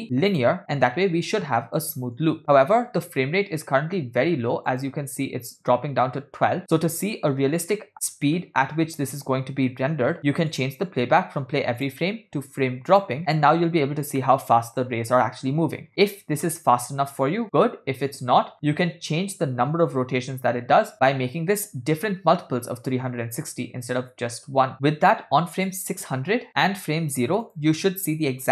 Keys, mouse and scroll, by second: 1.9 drag, 2.4 space, 4.7 click, 6.6 space, 8.0-8.6 middle drag, 10.5-13.2 drag, 13.5 space, 14.5 middle click, 15.3-15.7 scroll up 2, 16.0 scroll down 2, 19.2 scroll up 2, 19.2 space, 25.8 click, 27.6 click.